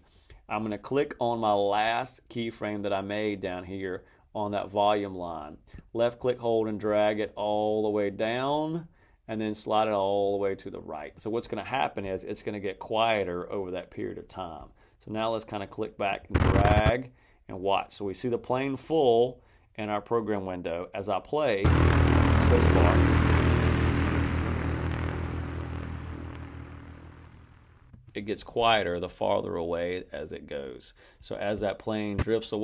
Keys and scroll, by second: 21.5 space, 27.8 space.